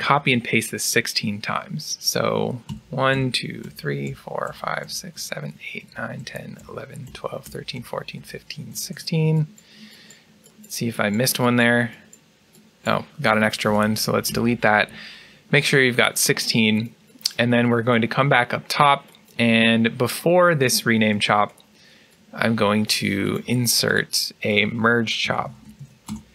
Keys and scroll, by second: 2.6 ctrl+v, 3.0 ctrl+v, 14.2 ctrl+v, 14.2 Delete.